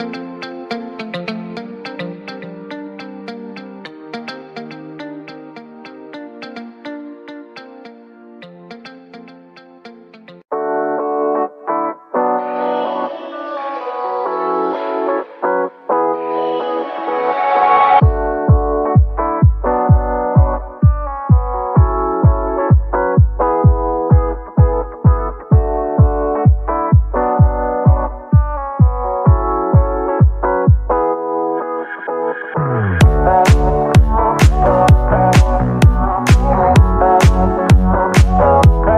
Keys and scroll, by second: 8.3 Escape, 8.8 Escape, 17.5-18.5 typing, 22.6 Escape, 28.8-29.8 typing, 32.7 Escape.